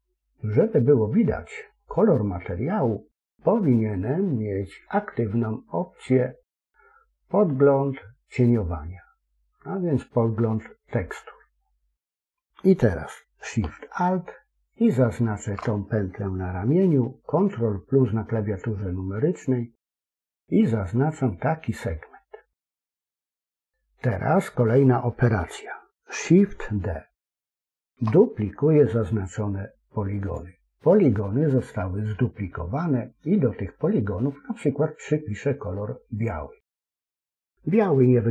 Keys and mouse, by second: 14.7 alt+shift+click, 17.3 ctrl+KP_Add, 17.8 ctrl+KP_Add, 18.9 ctrl+KP_Add, 21.2-23.6 middle drag, 27.4 shift+d, 36.1 click.